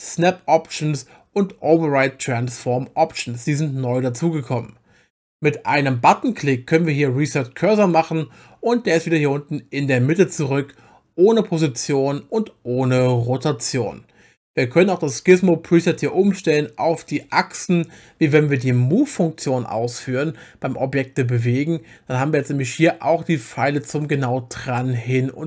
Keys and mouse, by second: 7.8 click, 17.2 click, 22.8 click, 24.1 click.